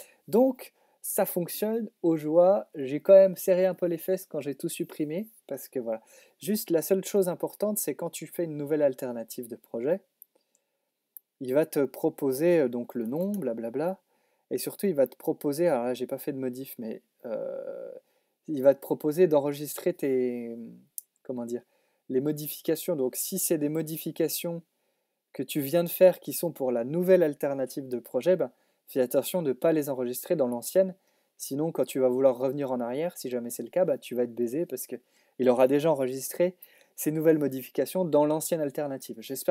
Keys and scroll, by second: 12.6-13.9 typing.